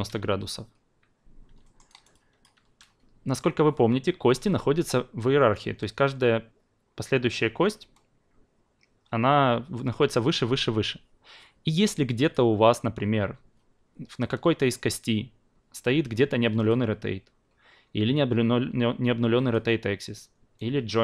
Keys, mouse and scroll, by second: 1.6 alt+middle click, 2.2-2.7 alt+drag, 12.2 click, 16.6 click, 19.5-21.0 drag.